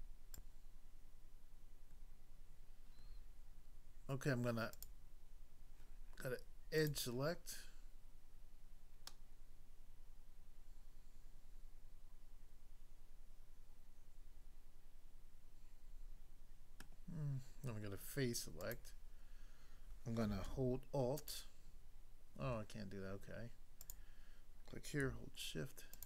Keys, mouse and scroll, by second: 0.3 click, 4.8 click, 6.8 click, 9.0 middle click, 16.8 middle click, 18.6 click, 21.2 alt+click, 23.8 click, 25.9 shift+click.